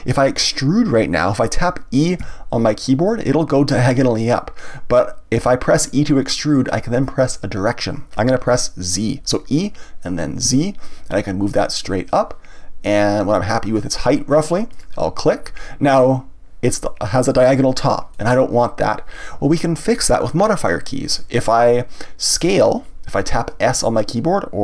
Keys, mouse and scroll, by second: 2.2 e, 14.8 click, 18.1-21.1 middle drag.